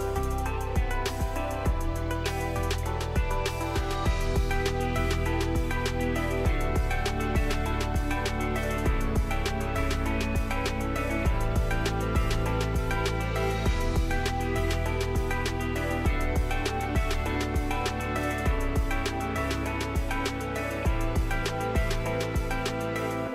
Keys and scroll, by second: 8.6 typing, 18.9-20.0 typing.